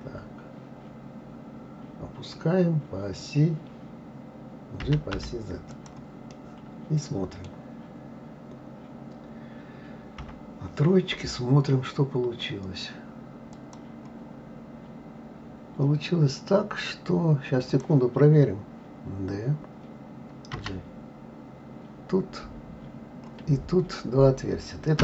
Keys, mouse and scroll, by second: 6.2-9.3 middle drag, 10.1 KP_3, 11.6-13.5 scroll up 1, 13.5 click, 15.4 scroll up 2, 16.9 scroll down 1, 17.7 click, 20.6 g.